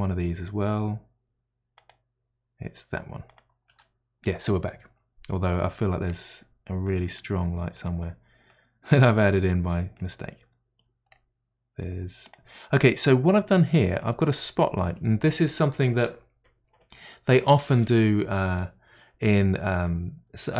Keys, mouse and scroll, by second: 1.8 click, 3.3 click, 3.8 Delete, 5.5-6.4 middle drag, 6.4-6.9 scroll down 3, 6.9-8.0 middle drag, 8.0 scroll down 4, 8.5-10.0 middle drag, 10.0 scroll up 1, 10.1-10.7 scroll down 4, 11.0-11.4 scroll up 7, 12.2 click, 12.8-14.3 middle drag, 14.3-17.6 scroll up 6.